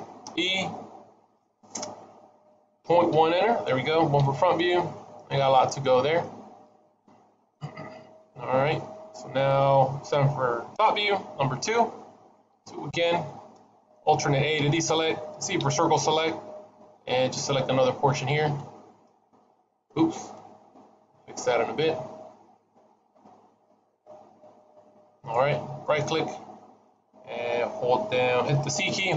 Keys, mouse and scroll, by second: 0.1 e, 4.0 KP_1, 6.1 middle click, 9.9 KP_7, 11.5 KP_2, 12.4 KP_2, 14.4 alt+a, 15.5 c, 26.7 middle click, 28.7 c.